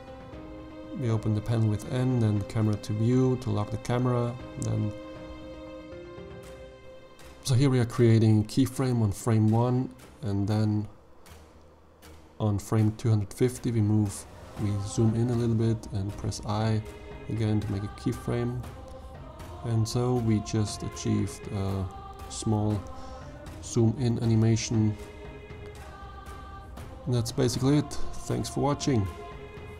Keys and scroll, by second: 7.0 i, 14.2 i.